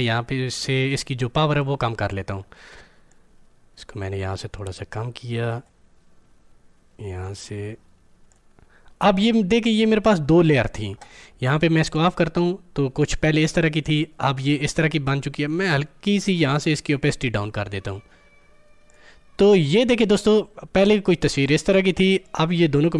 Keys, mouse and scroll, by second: 3.3-8.3 drag.